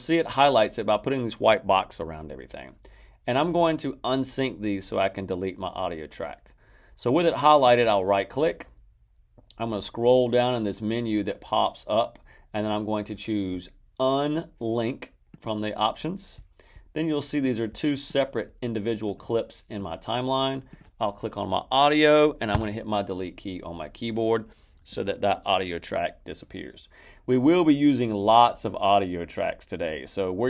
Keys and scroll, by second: 22.5 Delete.